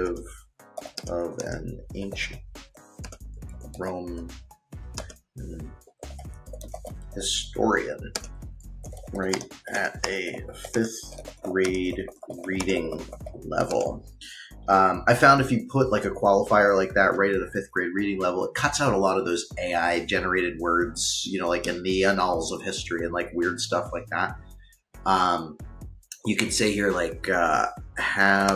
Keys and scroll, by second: 0.0-13.9 typing, 27.2-28.5 typing.